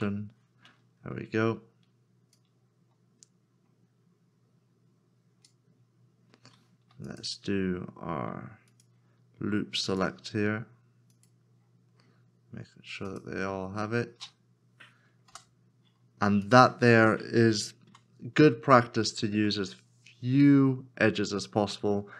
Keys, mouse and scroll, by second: 7.1 alt+click, 8.4 alt+s, 11.2 alt+shift+click, 13.1 alt+shift+click, 15.3 f, 17.9 f, 17.9 Tab, 19.3 Tab.